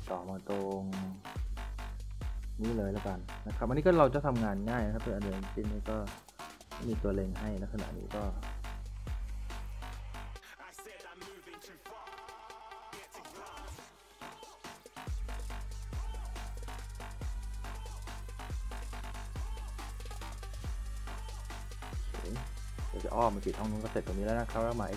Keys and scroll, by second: 0.3-4.6 typing, 11.6 s, 12.3 w, 12.8 s, 14.5-16.3 typing, 20.4-21.8 typing, 23.1 a.